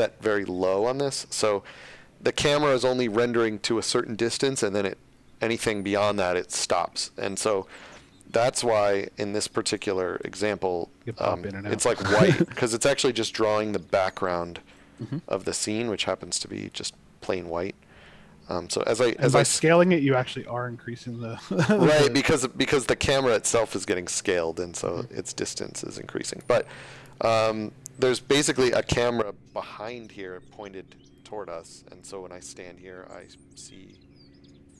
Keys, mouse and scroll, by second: 7.6-8.0 scroll down 1, 8.6 scroll down 1, 9.5-9.8 scroll up 1, 10.6 shift+scroll, 12.1-12.5 shift+scroll, 14.9-15.6 scroll up 1, 15.9 scroll, 16.5-17.3 shift+scroll, 18.6 shift+scroll, 20.0 shift+scroll, 20.6 shift+scroll, 22.6 scroll up 1, 23.8 scroll, 27.0-28.8 typing, 31.1 click, 32.6 d.